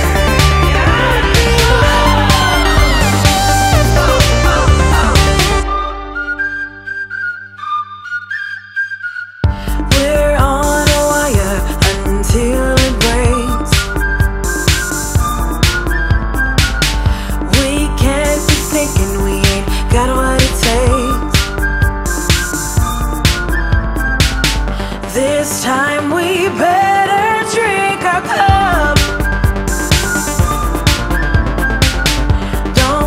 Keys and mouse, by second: 1.1 click, 5.0 click, 5.1 click, 9.0 click, 15.4 click, 16.3 click, 21.0 click, 23.1 click, 24.3 ctrl+d, 25.1 click, 26.5 click, 28.1 click, 28.9 click.